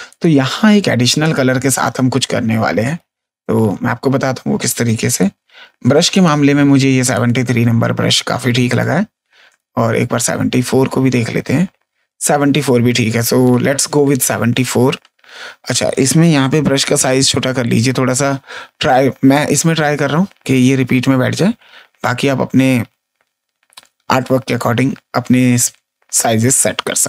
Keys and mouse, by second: 0.0 click, 1.2 click, 2.8 click, 4.0 ctrl+z, 5.0 click, 6.1 click, 8.6 click, 11.8 ctrl+z.